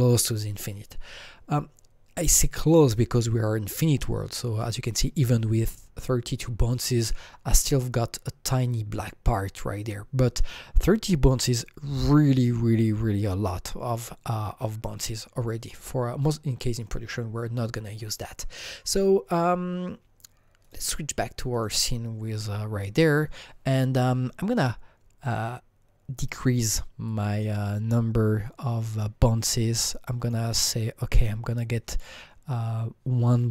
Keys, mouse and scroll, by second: 17.0 Right, 17.0 alt+Tab, 17.0 Escape, 18.9 click, 20.6 Escape, 20.6 click, 21.5 click, 25.2-26.5 drag, 27.1 click.